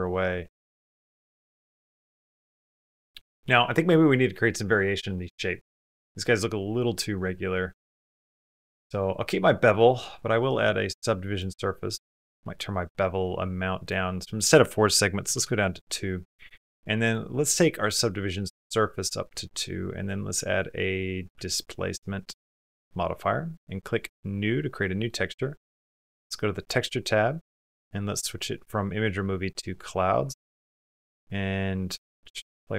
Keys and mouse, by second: 0.2 middle click, 0.8 middle click, 1.7 middle click, 2.6 middle click, 4.9 middle click, 6.5 click, 7.5 click, 9.6 click, 11.4-12.4 drag, 12.5-13.7 drag, 19.8-22.0 drag, 22.7 click, 24.0 click, 24.7 click, 26.3 click, 28.1-29.5 drag, 30.3 click, 31.6-32.6 drag.